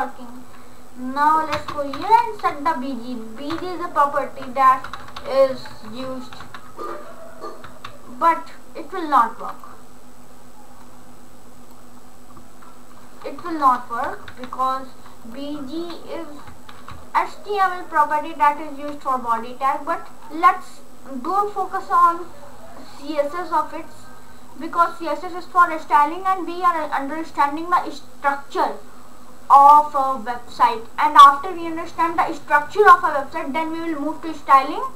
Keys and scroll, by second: 1.7-3.6 typing, 4.7-5.7 typing, 6.4 ctrl+s, 13.5 BackSpace, 14.3 ctrl+s.